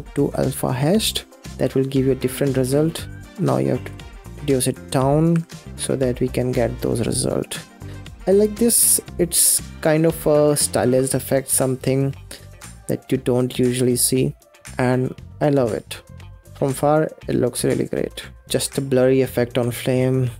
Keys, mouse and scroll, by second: 1.8 scroll down 1, 2.3-3.5 scroll up 2, 3.7 click, 5.0 click, 5.7-6.4 scroll down 4, 6.7-7.9 middle drag, 7.9-8.5 scroll up 1, 8.5-14.0 middle drag, 14.0 scroll down 2, 14.4 middle click, 14.8-15.4 scroll up 3, 15.4-16.2 scroll down 1, 16.2 middle click, 16.4 scroll down 6, 16.6-17.8 middle drag, 17.8-18.2 scroll up 1, 18.2 ctrl+s, 18.4 space.